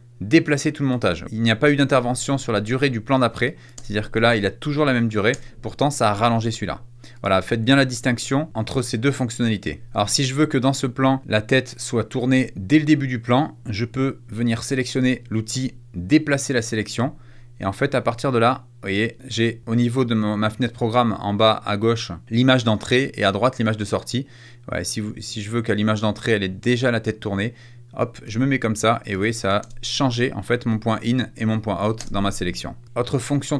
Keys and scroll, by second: 3.7 space, 5.2 space, 9.8 space, 29.5 space, 31.9 space.